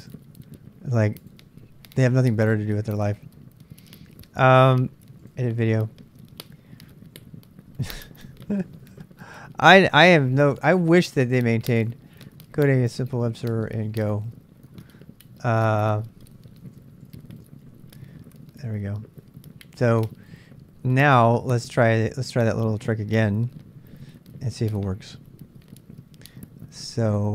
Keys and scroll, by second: 13.3-14.6 typing, 15.6-18.2 typing.